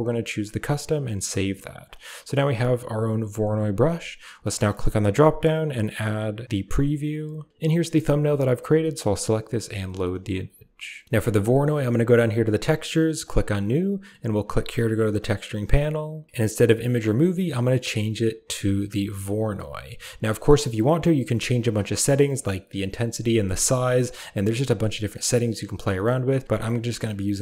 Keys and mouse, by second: 1.8 click, 4.6-7.5 drag, 10.0 click, 13.2 click, 16.8-19.5 drag, 20.9 click, 24.1-25.1 drag, 26.5 click.